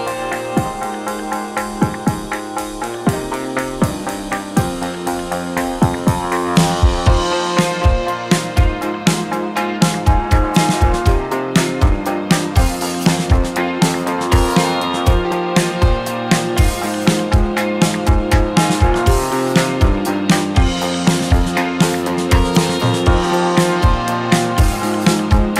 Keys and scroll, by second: 2.1 KP_1, 6.5 KP_1, 13.4 2, 17.8 3.